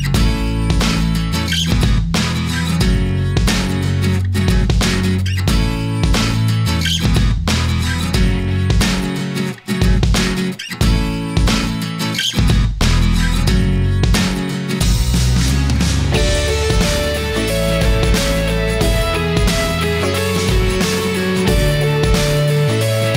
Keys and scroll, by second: 21.3 Delete.